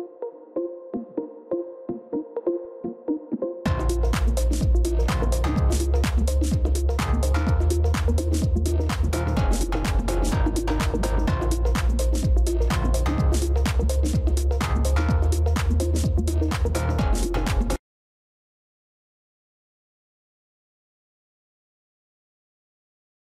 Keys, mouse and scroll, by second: 5.5 space, 13.0 scroll up 1, 15.5-15.8 scroll up 1.